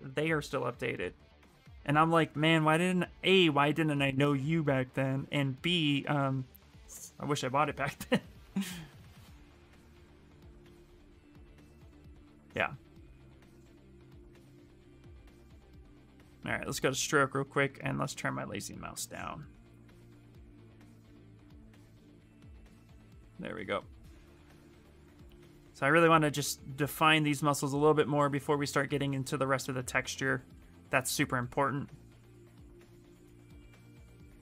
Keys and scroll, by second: 0.4-1.3 typing, 7.6-9.1 typing.